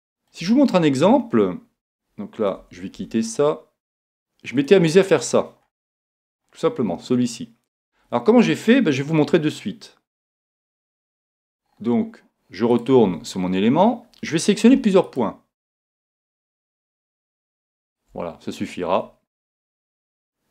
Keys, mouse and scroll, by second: 2.6 Tab, 2.9 a, 4.7-6.5 drag, 6.3-8.4 middle drag, 10.8-12.6 drag, 12.3 middle click, 12.7-14.5 right drag, 13.1 Tab, 13.4-15.3 middle drag, 15.0-19.6 right drag.